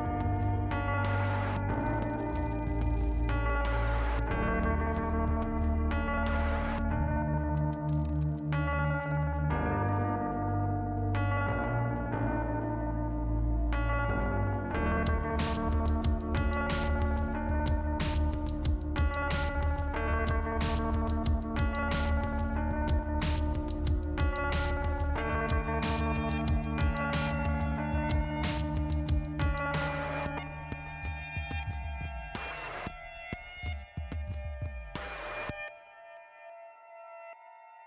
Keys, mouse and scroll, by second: 0.3 scroll up 2, 3.0 click, 4.9 click, 8.7 click, 10.0 click, 12.3 click, 13.3 click, 14.7 k, 15.6 scroll up 1, 17.6 click, 19.9 click, 20.0 click, 20.9 click, 22.4-23.6 scroll down 2, 23.8 click, 24.4-25.3 scroll up 2, 25.3 click, 27.1 click, 29.9 click, 30.0 click, 30.4-31.0 scroll down 2, 31.1 p, 31.2 scroll down 1, 31.2 p, 31.7 scroll down 2, 33.9-34.5 scroll up 2, 34.5-35.3 scroll down 1.